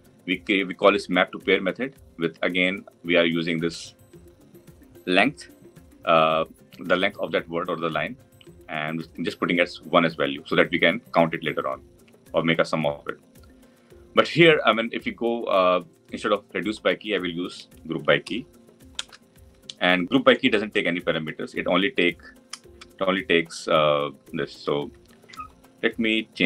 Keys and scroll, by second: 19.0 Return, 22.6 Return, 23.1 Delete.